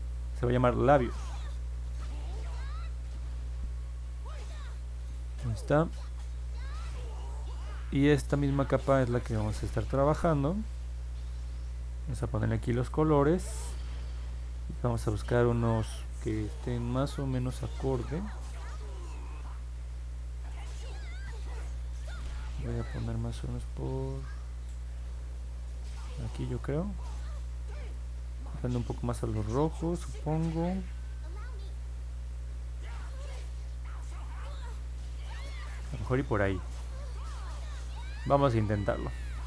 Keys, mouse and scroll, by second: 0.5 l, 0.8 a, 2.1 s, 19.4-21.2 drag, 32.5-35.8 drag.